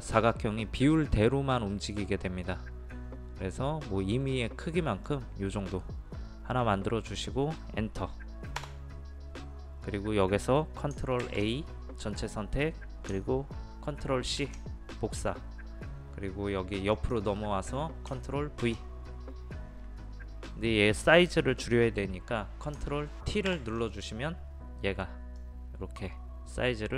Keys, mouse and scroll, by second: 8.6 Return, 11.2 ctrl+a, 14.4 ctrl+c, 16.9 click, 18.6 ctrl+v, 23.5 ctrl+t, 25.4-26.9 drag.